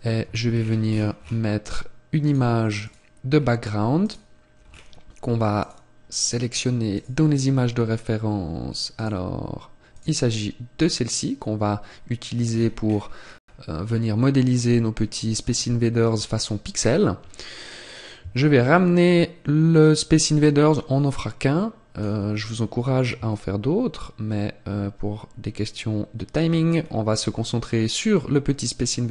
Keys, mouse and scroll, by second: 0.6-0.9 scroll down 1, 1.9-2.3 scroll down 13, 2.3 click, 3.4-4.0 scroll down 1, 4.0 click, 4.0-4.4 scroll down 1, 4.7 scroll down 1, 5.4 scroll down 2, 5.6 click, 11.1 click, 12.0-12.6 scroll up 1, 12.6-13.0 scroll down 3, 13.0 scroll down 5, 13.3 scroll up 2, 17.8 click, 26.8-28.4 scroll up 2, 28.4 scroll up 1, 28.9-29.1 scroll up 1.